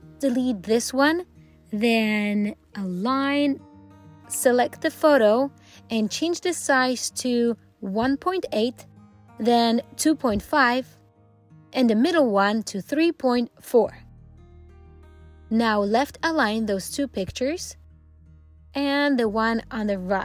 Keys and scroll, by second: 1.8 alt+l, 3.3 alt+c, 16.4 alt+l.